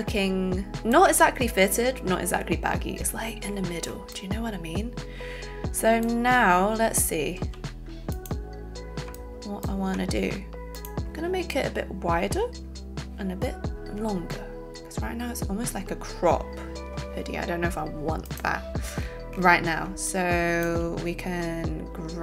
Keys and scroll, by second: 7.3 z.